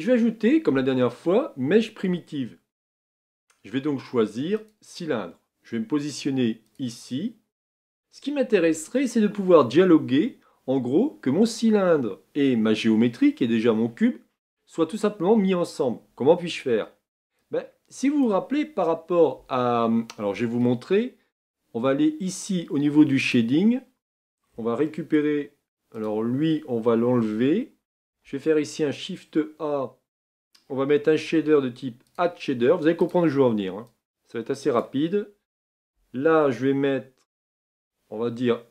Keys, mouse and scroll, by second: 23.4-24.1 drag, 26.0 click, 27.1 x, 34.8-38.7 drag.